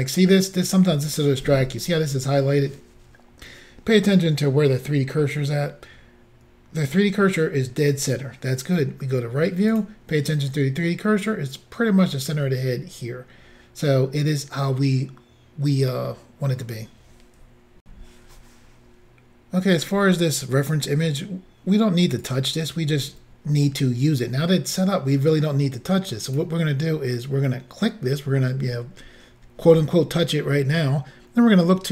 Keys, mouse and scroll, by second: 9.7 click, 17.8 Insert, 22.2 click, 26.3 click.